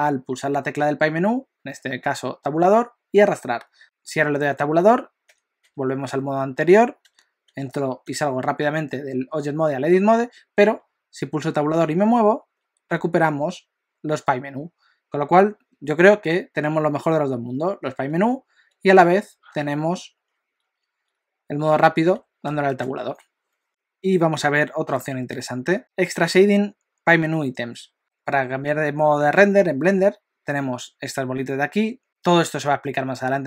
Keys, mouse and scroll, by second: 4.9 Tab, 5.3 Tab, 5.6 Tab, 7.0 Tab, 7.5 Tab, 8.0 Tab, 11.8 Tab, 12.9 Tab, 18.1 Tab, 18.7 Tab, 20.0 Tab, 20.6 Tab, 21.7 Tab, 22.2 Tab, 22.5 Tab, 22.8 Tab.